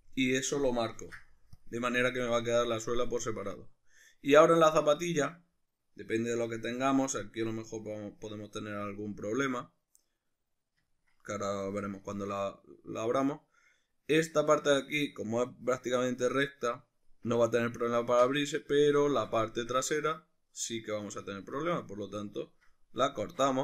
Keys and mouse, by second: 0.9 ctrl+e, 21.8 right click, 22.4 ctrl+right click, 23.2 shift+right drag.